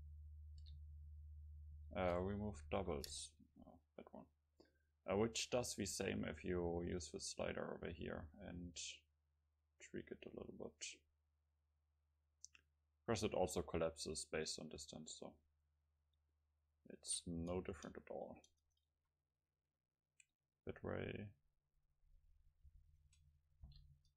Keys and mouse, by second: 5.8-7.9 drag, 17.2 middle click, 17.8 Tab, 18.7 Tab, 19.0 a, 21.9 click, 22.7 ctrl+z, 23.7 ctrl+t.